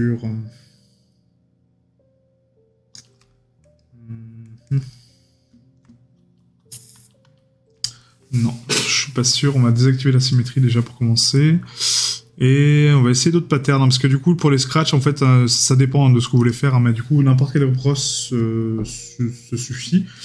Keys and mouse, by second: 19.8 right click.